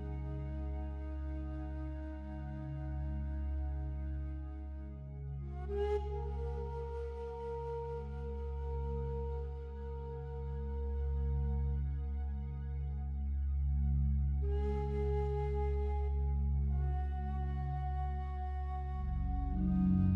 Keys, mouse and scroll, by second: 3.7-5.6 alt+drag, 5.6 e, 14.6 click, 16.4 s, 16.8 x, 18.8 Return.